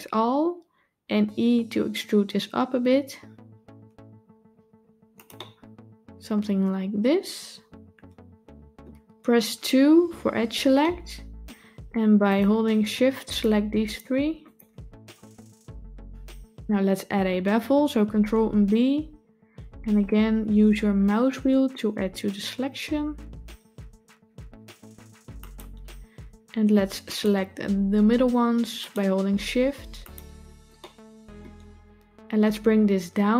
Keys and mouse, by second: 0.9 e, 5.3-8.7 middle drag, 9.8 2, 10.7 shift+middle click, 12.2 click, 14.3 shift+click, 18.0 ctrl+b, 27.0 click, 28.7 shift+click, 29.9 shift+click, 30.6 middle click.